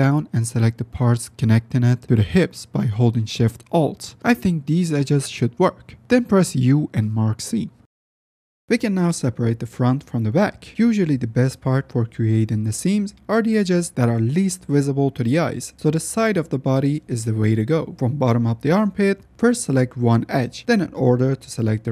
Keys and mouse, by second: 0.4-0.7 shift+drag, 0.7 shift+middle click, 1.4 shift+middle click, 1.8-2.2 middle drag, 4.0 alt+shift+click, 4.6 ctrl+alt+shift+z, 4.8-5.4 middle drag, 5.6 middle drag, 5.8 middle drag, 6.0 middle click, 6.6 shift+click, 7.3 u, 8.9-10.3 middle drag, 11.9-14.1 middle drag, 15.1 shift+middle click, 15.5 shift+middle drag, 15.9-16.6 middle drag, 18.3-18.8 middle drag, 19.3 middle click.